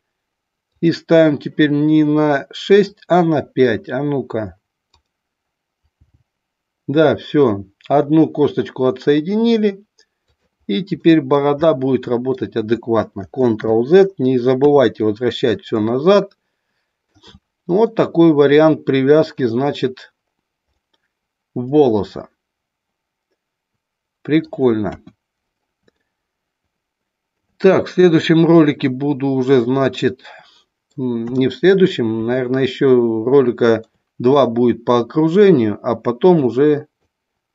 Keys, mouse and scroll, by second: 0.8 click, 2.6 click, 6.1 g, 10.4 click, 11.0-11.4 scroll up 1, 11.8 scroll up 1, 11.9 middle click, 13.5 ctrl+z, 14.5 KP_3, 15.9-17.1 shift+middle drag, 17.9-19.4 middle drag, 20.8-24.4 middle drag, 24.9 KP_1, 26.0-27.4 shift+middle drag, 30.3-31.0 middle drag, 31.1 KP_3, 32.4-33.9 shift+middle drag, 36.4 click.